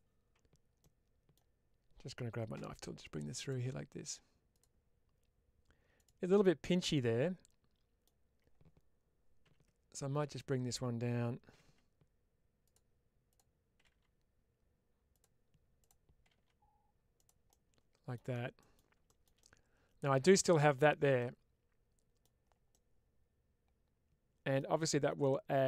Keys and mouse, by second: 0.7 middle click, 6.8-7.9 middle drag, 9.3 1, 10.2 click, 12.5 click, 15.0 click, 15.6 click, 17.0 click, 17.3 middle click, 18.4 middle click, 19.2 middle click, 21.0-22.1 middle drag, 22.6-24.4 middle drag, 25.1-25.6 middle drag.